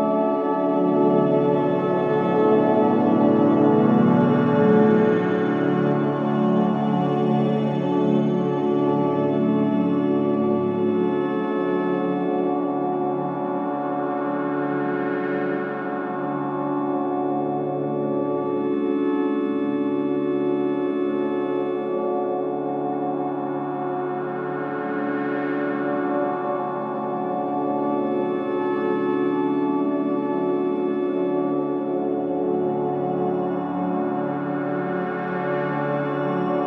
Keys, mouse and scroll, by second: 0.6 F7, 3.0 scroll down 1, 3.8 alt+click, 4.7 click, 5.9 scroll down 1, 6.7 ctrl+z, 7.6-8.9 drag, 8.9 scroll down 1, 10.3 click, 10.9-11.3 scroll up 1, 11.7 click, 14.0-14.6 scroll down 1, 15.1 click, 23.8-27.9 drag, 36.4-36.6 drag.